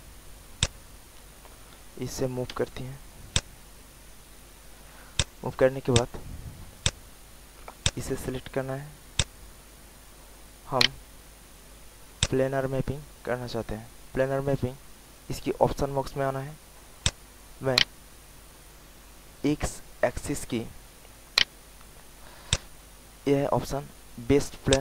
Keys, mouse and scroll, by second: 0.5-1.8 drag, 2.5 w, 3.2 click, 5.5 alt+middle click, 5.9 alt+click, 6.4 alt+middle click, 6.8 alt+click, 7.8 click, 9.1 alt+click, 10.4 alt+middle click, 10.7 alt+right click, 12.1-16.1 drag, 16.5 alt+middle click, 17.0 alt+click, 17.5 alt+middle click, 18.3 alt+middle click, 18.7 alt+click, 19.5 alt+middle click, 20.9 alt+middle click, 22.4-24.2 drag.